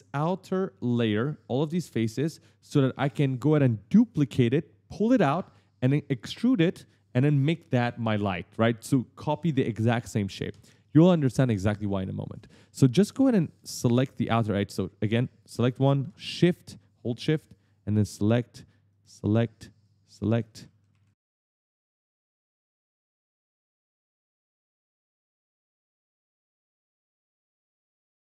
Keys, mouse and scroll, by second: 11.5-12.8 typing, 11.6 right click, 12.2 right click, 12.4 right click, 12.5 right click, 13.8 shift+click, 14.4 d, 14.6 right click, 15.5 right click, 15.9 shift+right click, 17.0 shift+click, 18.7 shift+click, 19.6 shift+click, 20.1-20.9 typing, 20.2 right click, 20.6 right click, 20.7 right click, 20.7 right click, 20.9 right click, 20.9 right click, 21.0 right click, 21.1 right click, 21.3 right click, 21.3 right click, 21.5 right click, 21.6 right click, 22.3 shift+click, 22.9 shift+click, 23.3 shift+click, 23.7 shift+click, 24.2 shift+click, 24.6 right click, 24.6 right click, 24.7 right click, 24.8 right click, 24.9 right click, 25.5 shift+click, 26.1 shift+click, 26.5 shift+click, 26.8 d, 27.1 w, 27.3 right click, 27.7 shift+click, 28.2 shift+click.